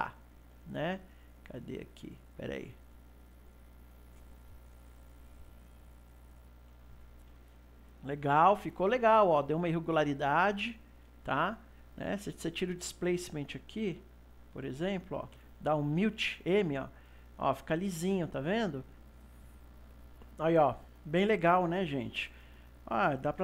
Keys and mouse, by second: 2.0 click, 3.4 click, 14.5 click, 15.5 m.